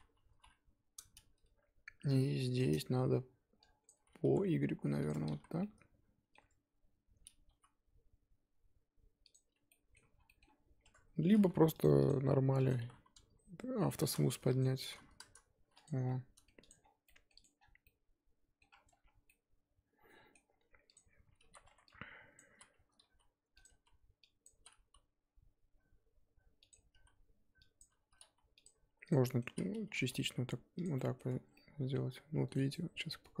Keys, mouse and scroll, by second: 0.3 KP_3, 1.0-2.1 scroll up 2, 2.6 click, 3.8 click, 4.2 g, 5.1 Tab, 5.4 z, 5.5 scroll down 2, 5.6 middle click, 6.4 Tab, 7.4 s, 9.7 middle click, 10.1 scroll down 1, 10.2 middle click, 10.4-10.8 scroll up 2, 10.8 Tab, 14.0-15.8 drag, 15.9 scroll down 1, 16.0 middle click, 16.6 click, 16.8 scroll down 3, 17.0 middle click, 17.3 click, 17.5 scroll down 4, 17.8 middle click, 18.7-19.2 scroll up 7, 19.3-20.4 middle drag, 20.4-20.9 scroll up 2, 20.9 click, 21.2 Tab, 21.4 z, 22.3 click, 22.5-24.7 typing, 24.4 click, 27.0 z, 27.8 click, 28.2 s, 29.1 click, 29.2 middle click, 29.4 z, 29.9 g, 30.9 middle click, 31.3 Tab, 31.4 scroll down 2, 31.5-33.4 middle drag.